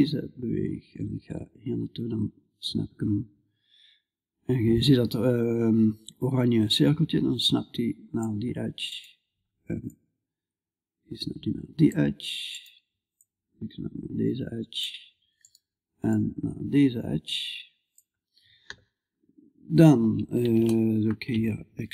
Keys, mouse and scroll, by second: 9.3-11.3 drag, 9.3-11.3 right drag, 12.6-17.4 drag, 12.6-14.2 right drag, 15.5-17.4 right drag, 21.6-21.9 middle drag, 21.6 e.